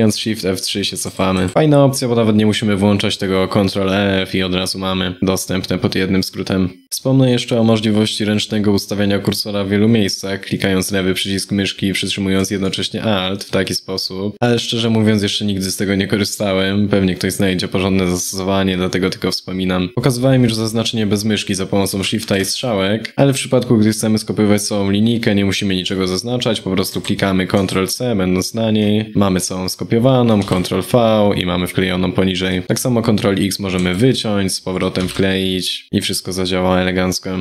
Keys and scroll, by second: 0.7 shift+F3, 1.0 shift+F3, 1.3 shift+F3, 28.9 ctrl+c, 33.5 ctrl+x.